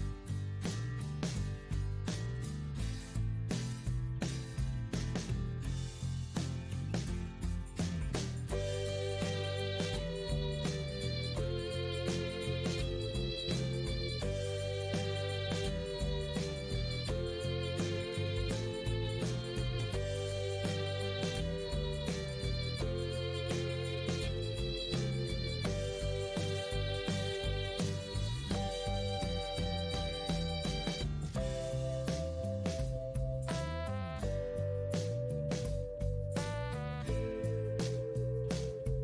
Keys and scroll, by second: 2.4 Return, 5.0 Return, 10.6 Return, 14.6 Return, 17.8 Return, 20.2 Return, 26.0 Return, 30.6 Return, 33.6 Return, 35.4 Return.